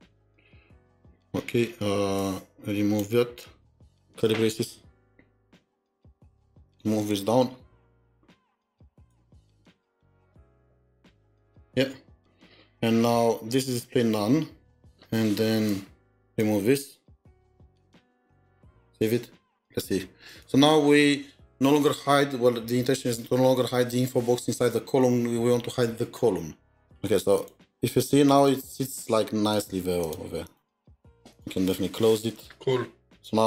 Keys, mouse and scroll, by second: 0.0 typing, 3.8 typing, 5.5 Return, 7.4 alt+Down, 7.6 alt+Down, 8.0 alt+Up, 8.8 Down, 10.6 ctrl+shift+k, 11.4 ctrl+s, 17.7 ctrl+s, 17.8 BackSpace, 18.3 BackSpace, 19.4 ctrl+s, 28.0 double click, 28.4 double click, 28.8 double click, 29.5 double click, 30.0 double click, 30.4 double click, 33.1 double click, 33.2 double click.